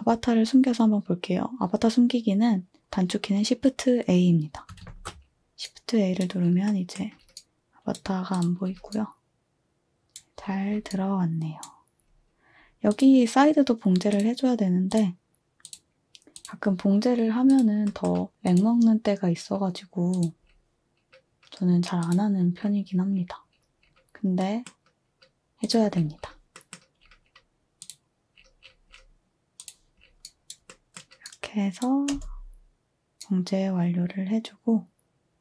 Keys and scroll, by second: 4.8 a, 32.1 space.